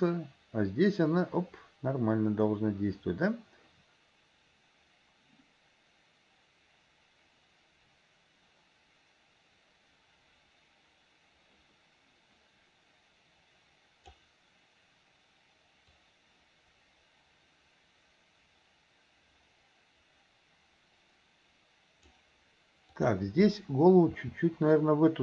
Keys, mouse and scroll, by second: 16.1-22.2 drag, 23.0 click, 24.1 r.